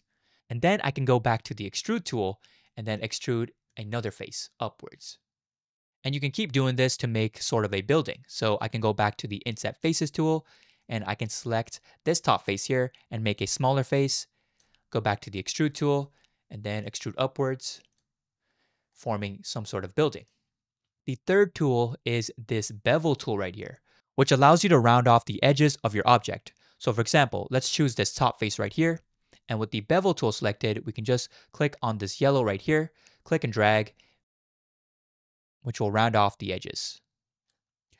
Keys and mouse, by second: 1.7 click, 2.7 middle click, 3.7-5.0 drag, 7.2 click, 7.4 middle click, 9.9-10.9 drag, 10.9 middle click, 13.7 click, 15.3 click, 15.8 middle click, 16.8-18.0 drag, 18.9-20.3 middle drag, 28.6 click, 32.6 click, 33.5-37.5 drag.